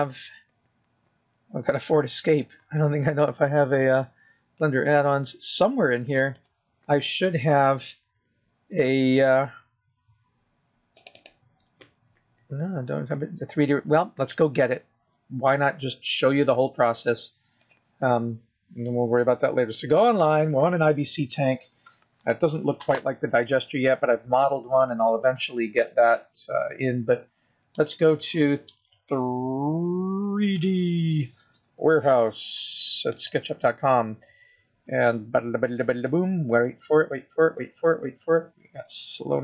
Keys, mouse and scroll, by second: 18.0 click.